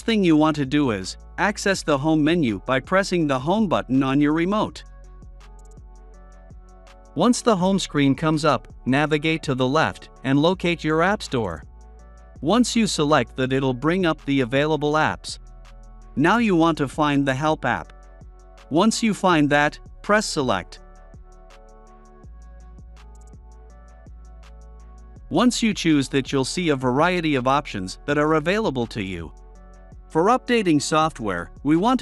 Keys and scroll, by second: 2.2 Home, 3.2 Home, 8.2 Left, 9.7 Left, 10.9 Return, 20.3 Return.